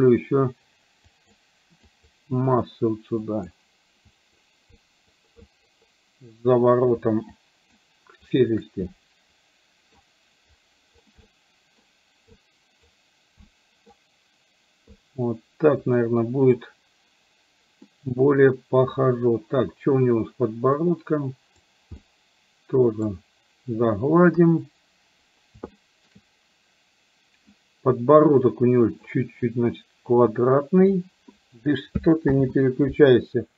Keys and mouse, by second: 0.1 click, 1.1 click, 1.9 click, 3.2 click, 4.2 click, 4.8 click, 5.4 click, 7.4 shift+click, 8.3 shift+click, 8.9-10.1 middle drag, 11.3 middle click, 12.4 click, 13.6 middle click, 16.1 middle click, 17.9 middle click, 20.8 click, 22.1 middle click, 24.4 KP_1, 25.9 middle click, 30.2 click, 32.6 ctrl+z.